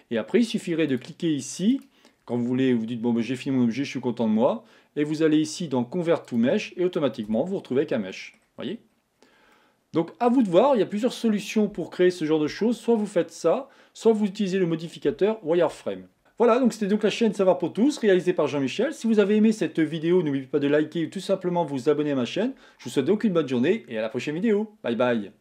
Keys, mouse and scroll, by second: 1.0 click, 1.8-4.8 right drag, 7.4 Tab, 7.6 scroll down 1, 8.2 middle click, 8.7-9.2 scroll up 4, 9.2 scroll down 2, 9.6-12.6 middle drag, 16.2-18.0 scroll down 2.